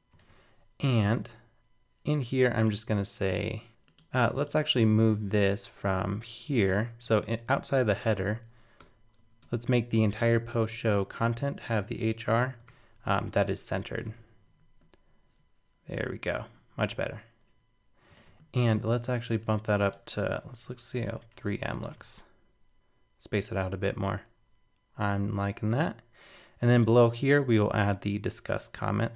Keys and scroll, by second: 0.2 super+Tab, 3.7 super+c, 10.7 super+v, 12.6 super+[, 12.9 super+s, 13.2 super+Tab, 14.0 super+r, 18.1 super+Tab, 21.0 super+s, 21.3 super+Tab, 21.9 super+r.